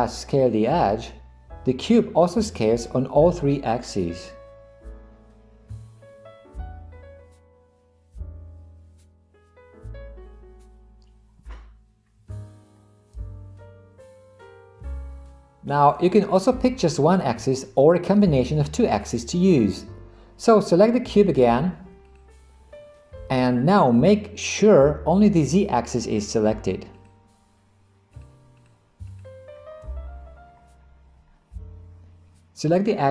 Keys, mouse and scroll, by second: 22.2 click, 27.0 click, 28.2 click, 28.6 drag, 29.1 click.